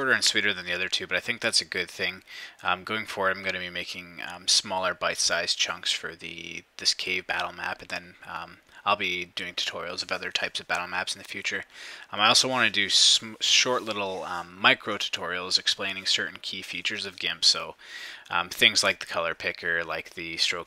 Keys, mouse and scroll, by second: 6.9 shift+=, 7.4 shift+click, 10.0 -, 10.1-12.3 ctrl+drag, 10.9 -.